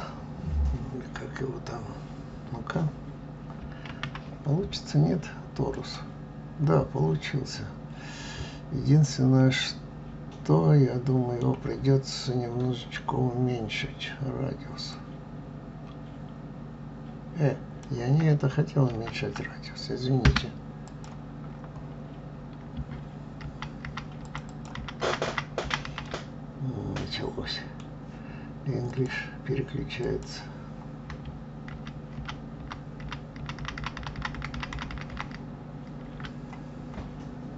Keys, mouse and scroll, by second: 3.9 shift+a, 9.0-12.0 middle drag, 14.9-17.9 drag, 18.9 ctrl+y, 20.3 Escape, 20.9 click, 21.5-21.9 scroll down 5, 22.3-22.9 scroll up 2, 23.5 ctrl+y, 23.8 ctrl+y, 24.2 ctrl+y, 24.2 ctrl+click, 24.5 ctrl+click, 24.7 ctrl+y, 25.0 ctrl+y, 25.3 ctrl+y, 25.6 ctrl+y, 25.9 ctrl+y, 26.0-29.0 ctrl+middle drag, 31.7 ctrl+z, 32.1 ctrl+z, 33.0 ctrl+z, 33.4 ctrl+z, 33.6 ctrl+z, 33.8 ctrl+z, 34.0 ctrl+z, 34.2 ctrl+z, 34.4 ctrl+z, 34.5 ctrl+z, 34.7 ctrl+z, 35.0 ctrl+z, 35.1 ctrl+z, 36.3-37.5 scroll up 9.